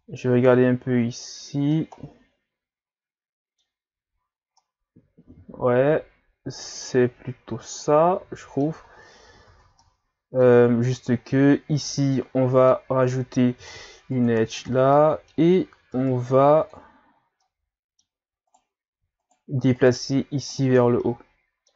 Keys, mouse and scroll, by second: 0.9-1.8 scroll up 4, 1.8-4.2 middle drag, 4.2-4.6 scroll down 2, 4.6-7.7 middle drag, 8.9 scroll down 3, 9.2 scroll up 2, 9.5 Tab, 9.8-10.9 middle drag, 10.9 scroll down 1, 11.1-11.7 scroll up 3, 11.7-12.1 scroll down 1, 12.1-13.6 middle drag, 13.6 ctrl+r, 14.9-15.9 middle drag, 15.9 ctrl+Tab, 17.4-18.5 middle drag, 18.5 right click, 19.2 shift+right click, 19.8 shift+right click, 20.5 shift+right click, 20.8-21.7 middle drag.